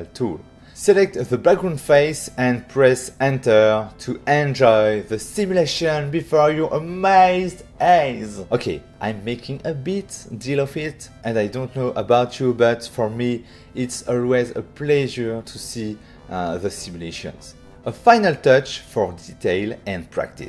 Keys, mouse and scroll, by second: 0.6 click, 2.5 Return, 7.5 alt+a, 8.1 shift+middle click, 9.5 middle click.